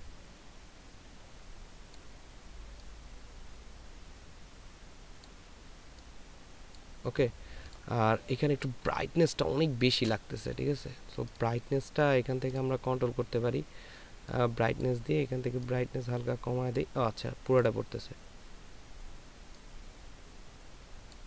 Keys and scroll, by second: 9.1 ctrl+space.